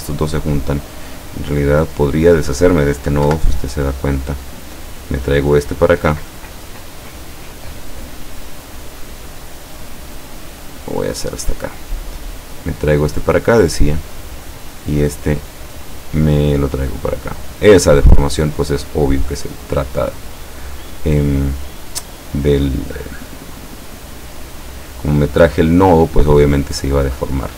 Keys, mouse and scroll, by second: 2.0 click, 3.3 Delete, 4.5-6.3 drag, 9.4-10.9 drag, 11.8-14.1 drag, 15.0-17.6 drag, 18.3-23.5 drag, 24.6-26.2 drag.